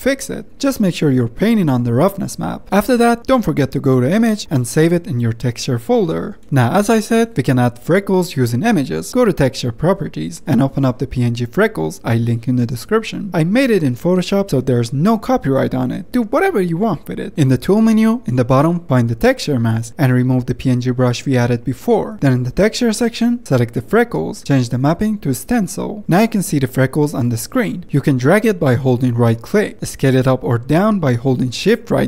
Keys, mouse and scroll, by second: 16.0-17.0 drag, 17.0-17.5 typing.